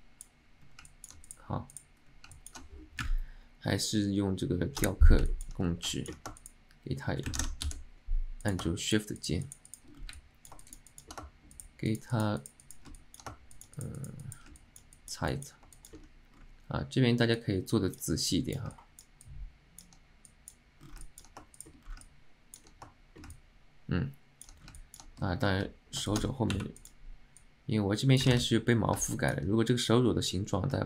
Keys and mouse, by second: 1.0 alt+middle click, 1.8 click, 2.4 alt+shift+middle drag, 5.4 middle click, 6.0 alt+shift+middle click, 6.5 shift+click, 7.5 ctrl+z, 8.9 shift+click, 9.3 shift+click, 9.5 shift+click, 9.8 shift+click, 10.2 alt+middle click, 10.7 alt+shift+middle click, 11.0 middle click, 11.6 shift+click, 12.0 shift+middle click, 12.1 shift+click, 12.2 shift+click, 12.5 shift+middle click, 12.7 shift+click, 13.1 alt+middle click, 13.6 shift+middle click, 13.7 shift+click, 14.1 shift+click, 14.3 shift+click, 14.7 alt+middle click, 15.1 alt+middle click, 15.5 alt+middle click, 15.9 shift+middle click, 17.5 click, 18.5 click, 18.8 alt+middle click, 19.3 alt+middle click, 20.4 click, 21.1 alt+middle click, 21.7 shift+middle click, 22.1 alt+middle click, 23.5-24.6 alt+middle drag, 24.9 alt+middle click, 25.5 alt+middle click, 26.2 alt+shift+middle click, 26.9 click, 27.5-28.5 drag, 28.4 ctrl+z, 29.2 middle click.